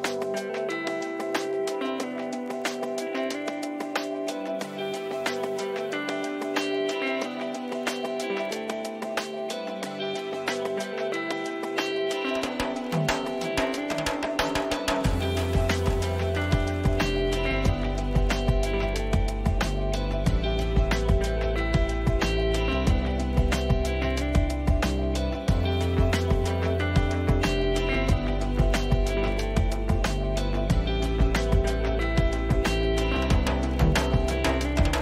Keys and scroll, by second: 15.8 ctrl+-, 30.8 Return, 31.3 ctrl++.